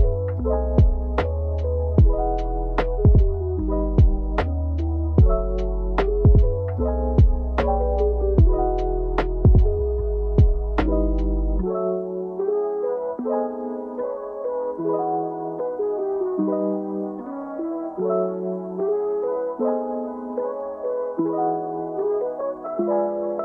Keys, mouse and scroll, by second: 10.3 click, 14.2 r, 14.7 KP_1, 15.0 KP_8, 15.1 KP_0, 16.1 Return, 18.7 i, 22.7 click.